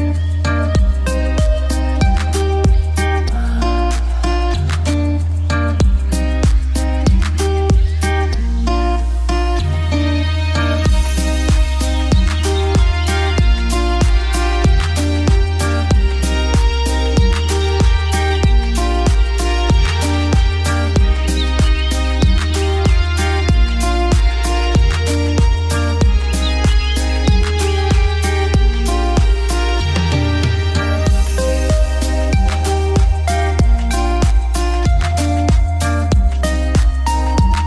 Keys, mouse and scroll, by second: 2.5 ctrl+right click, 3.0 click, 5.6-20.7 drag, 25.0 F3, 29.5 click, 32.5 Return, 32.8 click, 34.5 shift+Page_Up, 35.3 shift+click, 35.4-36.3 typing, 36.3 click, 36.6 F2, 36.9-37.6 drag.